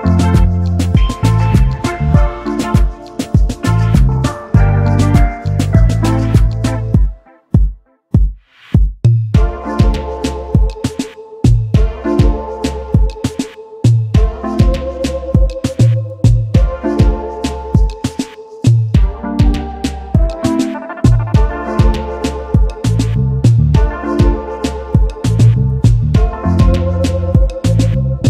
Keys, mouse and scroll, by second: 4.2 Down, 5.6 alt+scroll down 1, 5.8 alt+scroll up 1, 5.9-6.5 alt+scroll down 1, 6.8 space, 6.9 double click, 10.6 right click, 13.8 double click, 14.2 shift+click, 15.9 double click, 17.4 shift+click, 18.9-19.2 alt+scroll down 1, 19.3 alt+click, 19.7 alt+scroll down 1, 20.2 double click, 23.7-24.5 alt+scroll up 1, 25.0 double click, 25.4 space, 26.2 space.